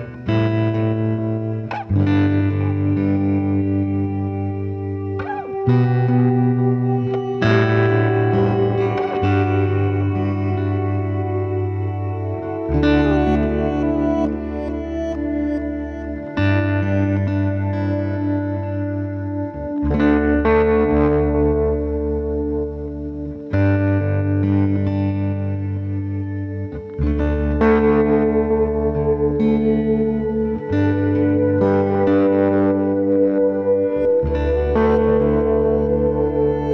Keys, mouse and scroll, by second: 0.4-0.7 scroll up 1, 0.7-1.1 shift+middle drag, 1.1-1.5 scroll up 2, 1.5-4.5 typing, 2.8 middle click, 3.7 middle click, 4.9-5.4 scroll up 2, 5.1 shift+middle click, 5.4 shift+middle click, 5.5 s, 5.9 g, 7.3 middle drag, 7.5 scroll down 2, 7.5-7.9 shift+middle drag, 7.9 scroll up 2, 8.0-8.3 shift+middle drag, 8.3 s, 9.2-10.7 shift+middle drag, 10.7 r, 11.3 middle click, 11.7 s, 13.1 g, 14.0 r, 16.0 middle click, 16.4 click, 16.5 scroll down 2, 16.6 middle click, 16.8 click, 17.2 s, 17.6 scroll down 1, 17.7 middle click, 17.9 scroll up 4, 18.2 click, 18.3 scroll down 1, 18.4-18.9 middle drag, 18.9 drag, 19.1 `, 21.2 g, 21.8 scroll up 1, 22.0 s, 22.4 middle click, 22.8 g, 24.3 click, 24.8-25.6 scroll up 2, 25.0 shift+middle click, 25.6 g, 26.3 scroll down 1, 26.4-26.7 middle drag, 26.7 s, 27.3 click, 27.4-27.8 middle drag, 27.8 click, 28.0-29.1 middle drag, 29.1-29.8 scroll down 2, 29.8-30.1 middle drag, 30.1 drag, 30.5 middle click, 30.8-31.7 scroll down 1, 31.7 shift+a, 34.2-35.0 scroll down 1, 35.0 g, 36.3 r.